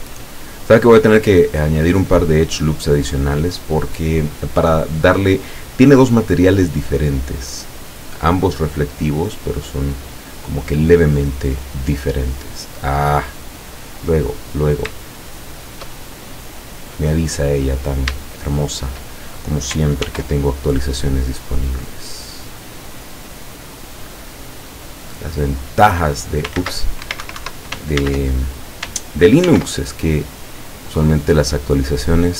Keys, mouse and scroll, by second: 1.8 click, 2.2-3.4 middle drag, 3.9-4.8 middle drag, 7.4-10.4 drag, 10.7-12.0 middle drag, 15.3 shift+middle click, 16.0-17.4 shift+middle drag, 17.6-18.0 scroll up 2, 18.4 shift+middle click, 20.1 ctrl+r, 25.9 click, 26.6 ctrl+z, 27.1 ctrl+Escape, 28.0 ctrl+z, 29.5 ctrl+r, 30.9 click.